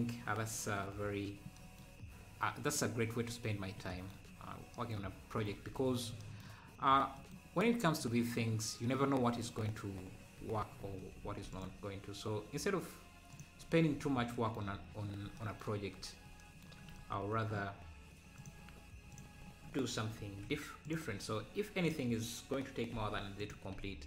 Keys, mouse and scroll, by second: 2.5-3.4 scroll up 2, 7.9-8.6 scroll up 2, 9.0-9.4 scroll up 1, 9.4 scroll down 1, 10.4 Tab, 10.7-11.2 scroll down 2, 11.3 ctrl+r, 13.6 ctrl+r, 14.7 scroll up 1, 18.4 click, 20.2 e, 21.9 click, 23.5 x.